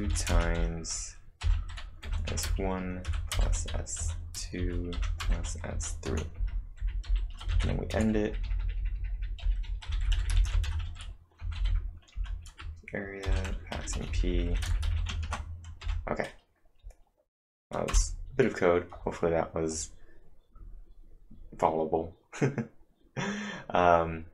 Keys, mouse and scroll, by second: 0.0-11.1 typing, 12.1 Return, 13.2-14.8 typing, 15.2 ctrl+`, 15.8 Up, 17.9 Return, 18.7-19.4 typing.